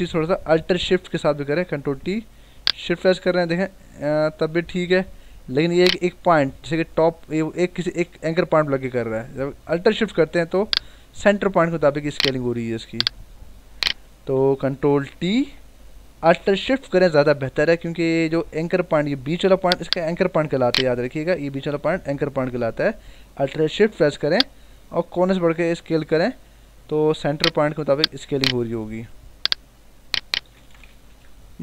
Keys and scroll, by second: 0.8 Escape, 1.8 ctrl+t, 8.5 Escape, 9.4 ctrl+t, 14.3 Escape, 15.2 ctrl+t, 21.6 ctrl+z, 31.0 Return.